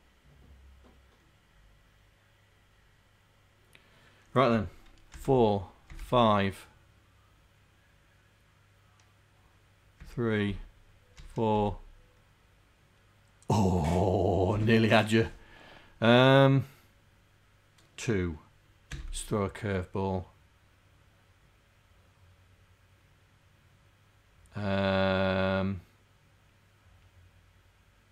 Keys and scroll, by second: 5.2 4, 5.3 Return, 5.9 5, 6.1 Return, 10.1 3, 10.5 Return, 11.2 4, 11.7 Return, 19.0 Return.